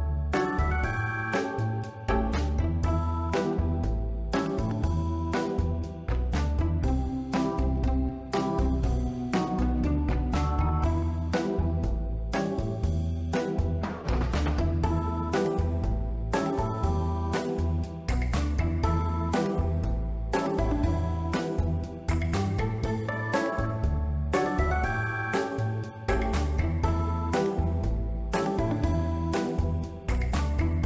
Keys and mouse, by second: 0.7 click, 2.0 Tab, 3.8 click, 10.5-10.9 middle drag, 11.3-11.8 ctrl+middle drag, 12.1 shift+a, 13.7 s, 14.5 click, 14.8 s, 15.0 z, 15.6 click, 16.3 shift+middle click, 16.6-17.1 ctrl+middle drag, 18.0 Tab, 18.4 ctrl+r, 18.9 Escape, 19.5 ctrl+b, 20.6 click, 20.7 Tab, 22.2 drag, 26.0 click, 26.7 click, 28.0-28.5 right drag, 29.7 Tab, 30.1 3, 30.7 s.